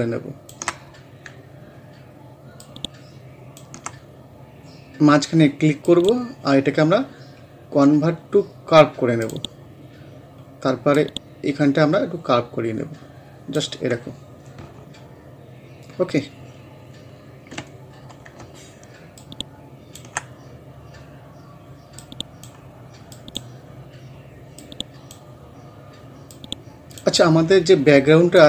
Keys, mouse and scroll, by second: 9.2-14.0 drag, 14.0 scroll down 1, 17.7 scroll up 1, 19.2-28.4 ctrl+drag.